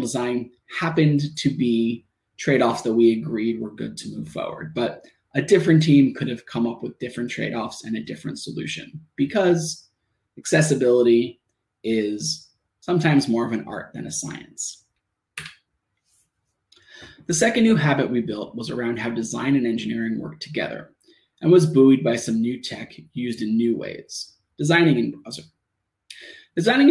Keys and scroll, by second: 4.3 Return, 4.8 shift+Return, 5.3 shift+Tab, 7.9 Tab, 11.2 shift+Tab, 14.6 Tab.